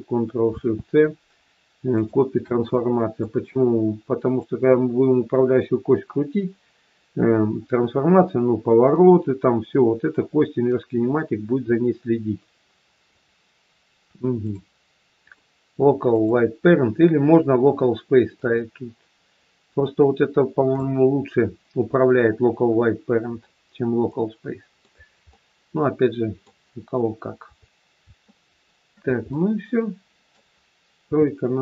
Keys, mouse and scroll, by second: 0.5 ctrl+shift+c, 2.7 middle click, 11.5-12.0 scroll down 4, 13.0 click, 13.0-15.1 scroll down 3, 15.1 click, 18.3 click, 24.1 middle click, 25.2 middle click, 26.7-27.4 scroll down 2, 28.2 shift+middle click, 29.2 middle click, 31.0 KP_3.